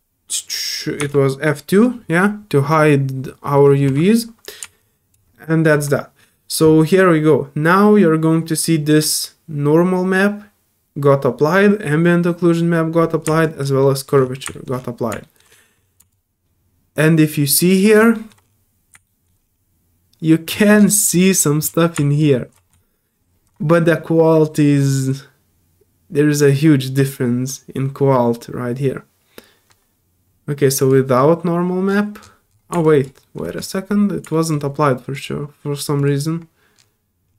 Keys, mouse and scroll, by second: 4.0 middle click, 4.8 alt+click, 5.3 alt+middle click, 13.4 alt+click, 13.8 alt+middle click, 14.2 alt+scroll up 2, 14.5 alt+middle click, 15.1 alt+scroll up 2, 15.2 alt+middle click, 16.1-17.9 alt+drag, 18.1 alt+middle click, 18.4 scroll up 1, 19.0 alt+middle click, 19.4 scroll up 2, 20.5 alt+middle click, 20.5-21.1 scroll down 3, 20.8 alt+middle click, 21.0 alt+middle click, 21.4 alt+middle click, 21.4 scroll up 1, 22.2-30.8 right drag, 30.8 click, 31.8 middle click, 31.8 scroll down 1, 32.2 middle click, 32.8 alt+click, 33.2 alt+middle click, 34.3 alt+middle click, 35.1 alt+click, 36.0 alt+click, 37.2 scroll up 2.